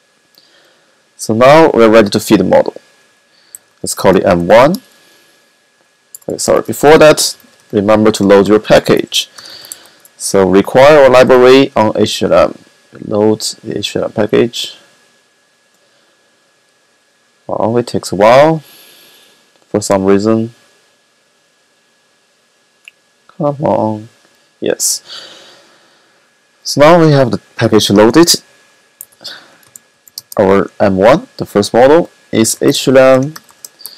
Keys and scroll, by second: 3.0-4.4 typing, 6.2-10.2 typing, 12.5-13.2 typing, 28.8-30.5 typing, 32.0-33.9 typing.